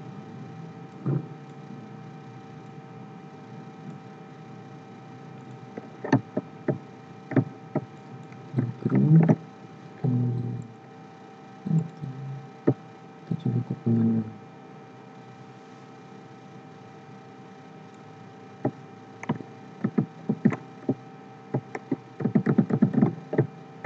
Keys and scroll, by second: 9.1 ctrl+g, 19.8 ctrl+d.